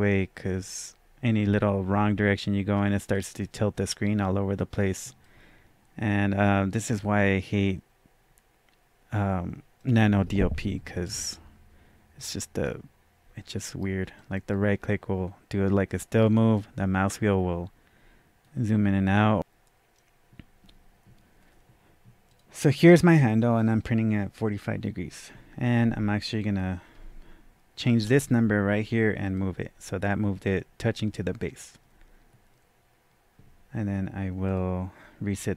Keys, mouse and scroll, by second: 3.1-3.4 drag, 5.2-5.5 drag, 7.0-7.3 drag, 12.6-19.1 right drag, 16.6-19.3 middle drag, 18.7-19.1 scroll up 1, 19.1 scroll down 1, 19.3-29.2 drag, 27.9 KP_0, 29.3 click, 34.4 click, 35.3-35.5 scroll down 1.